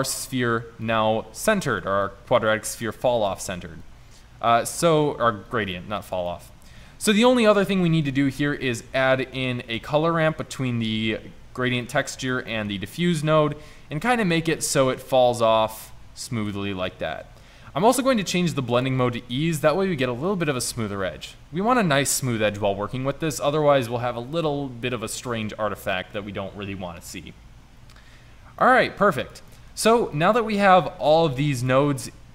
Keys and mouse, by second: 4.9 click, 6.3-7.6 drag, 8.3 shift+a, 12.6-13.4 drag, 14.2-15.4 drag, 27.6-28.7 middle drag, 29.3-30.7 drag, 31.7-32.3 drag.